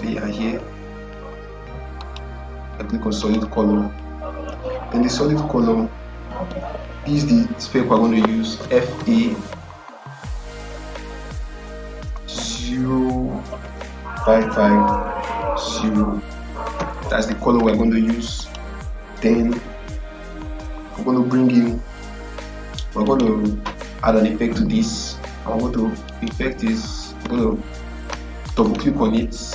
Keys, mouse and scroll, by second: 1.9 click, 8.2-8.9 typing, 13.5-14.3 typing, 16.7 typing, 18.3 click, 22.9 right click, 25.9 right click, 26.0 right click, 28.4 click.